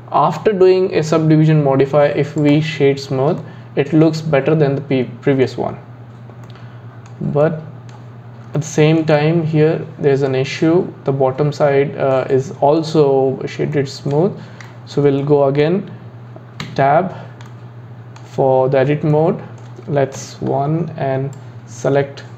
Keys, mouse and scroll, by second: 3.4-11.6 middle drag, 12.2-16.6 middle drag, 16.6 Tab, 17.5-20.2 middle drag, 20.2 KP_1, 21.3 click.